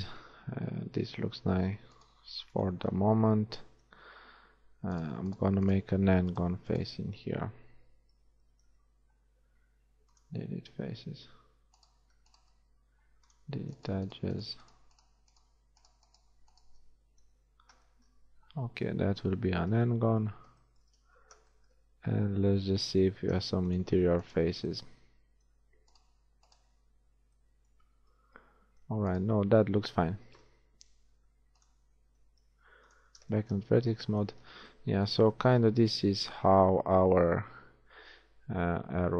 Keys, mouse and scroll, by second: 0.0 shift+g, 8.7 x, 11.9-15.7 drag, 12.7 shift+x, 17.3 shift+f, 17.6 a, 21.1 shift+z, 23.1 ctrl+Tab, 26.9 right click, 27.1 z, 27.7 z, 29.6 z, 30.4 KP_1, 31.1 ctrl+Tab, 32.5 ctrl+Tab, 33.1 z, 33.9 a, 34.5 Tab, 35.3 z.